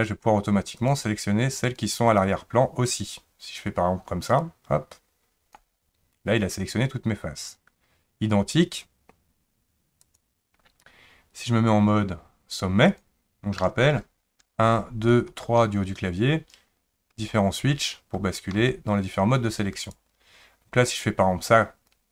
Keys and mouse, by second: 0.8 click, 4.4-5.6 drag, 10.0 click, 14.4 1, 14.9 2, 15.3 3, 17.2 1, 17.6 2, 18.0 3, 18.6 1, 21.0 click.